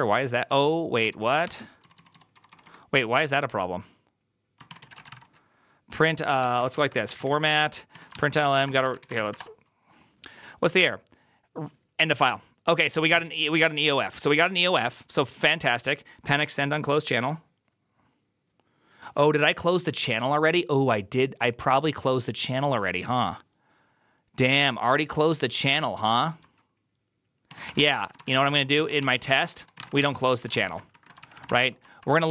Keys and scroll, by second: 0.0-3.0 typing, 1.3 ctrl+c, 4.3-9.7 typing, 7.8 Tab, 27.3-32.3 typing, 28.9 ctrl+c.